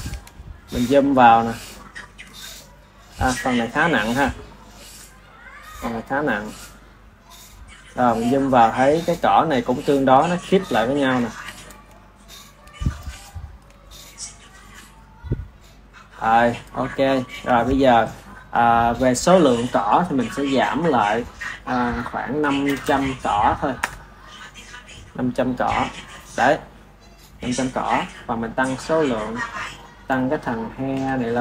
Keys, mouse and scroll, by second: 9.2-11.3 ctrl+middle drag, 11.3 KP_1, 12.0-18.9 ctrl+middle drag, 18.9 click, 20.6 click, 21.5-22.7 drag, 22.7 KP_0, 24.9 click, 28.9-31.3 drag.